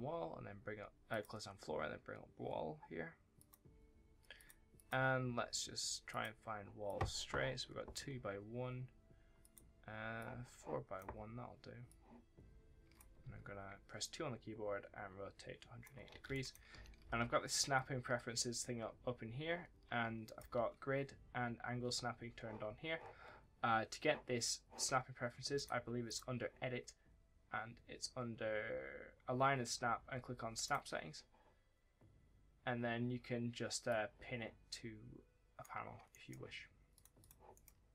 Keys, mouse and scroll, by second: 0.9 click, 1.7 scroll down 1, 3.2 click, 3.8 scroll down 1, 4.2 click, 5.4-5.9 scroll down 1, 5.9 click, 9.2 click, 13.1 2, 13.8 click, 15.7-17.1 typing, 16.2 right click, 18.0 scroll down 1, 18.3-18.6 scroll up 1, 18.6-19.3 scroll down 1, 20.1 right click, 20.2 w, 25.4 w, 30.5 click, 33.7 click, 35.9 right click, 36.8 click, 37.0 double click, 37.4 right click.